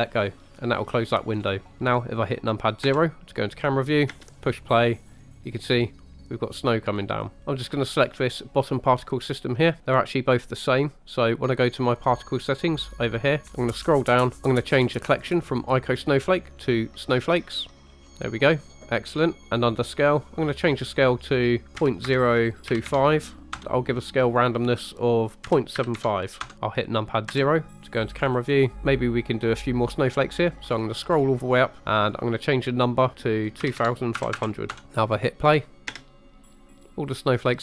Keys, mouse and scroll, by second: 1.4 scroll up 2, 2.9 KP_0, 4.1 space, 7.4 shift+click, 7.9 click, 12.8 click, 13.4-14.4 scroll down 8, 15.9-17.2 drag, 17.9 scroll up 6, 18.5-19.4 scroll down 3, 20.5-23.7 drag, 24.3-26.5 drag, 27.3 KP_0, 28.2-28.7 scroll up 5, 28.7-29.4 scroll down 5, 30.7-33.4 scroll up 7, 32.0-34.8 drag, 34.4 KP_0, 35.9 space.